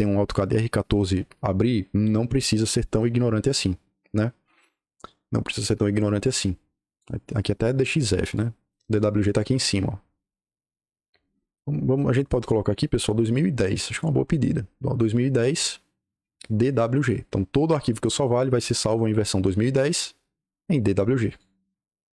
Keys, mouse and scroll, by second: 8.3-8.8 drag, 21.2 click.